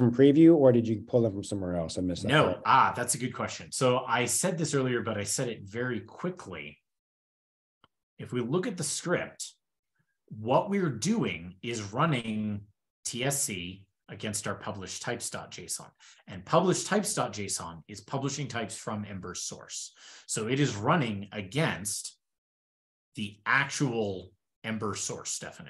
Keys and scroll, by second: 4.3 shift+super+[, 5.9 alt+super+[, 7.3 alt+super+[.